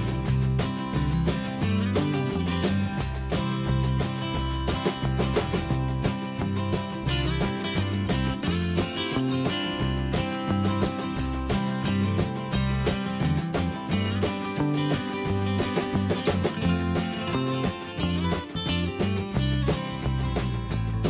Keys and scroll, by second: 4.0 ctrl+a, 8.7 alt+BackSpace, 10.5 Escape.